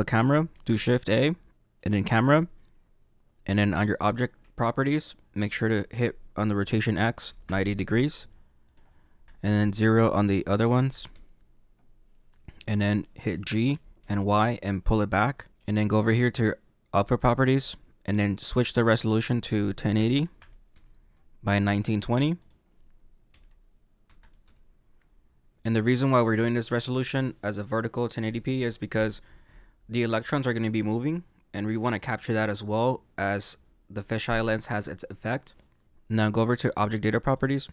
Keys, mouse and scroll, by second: 1.8 shift+a, 7.7 click, 9.4 click, 11.0 click, 13.7 g, 20.7 click, 22.0 click, 24.4 click.